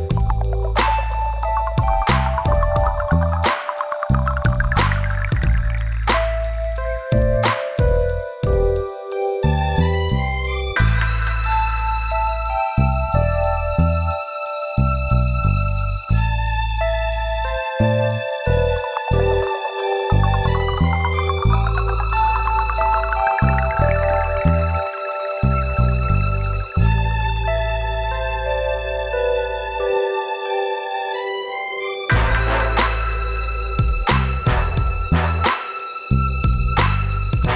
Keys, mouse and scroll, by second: 5.1 click, 5.2 click, 6.1 scroll down 2, 13.4 click, 13.5 click, 14.7 click, 18.8 right click, 19.0 right click, 19.8-20.2 scroll up 1, 21.2 p, 22.0 scroll down 2, 22.3 right click, 24.2 click, 25.3 click, 28.0 scroll up 1, 29.0 click, 30.0 click, 31.6 middle click, 33.7 m, 34.7 click, 34.9 typing, 36.0 click, 36.5 right click, 36.5 right click, 37.2 click, 37.3 click.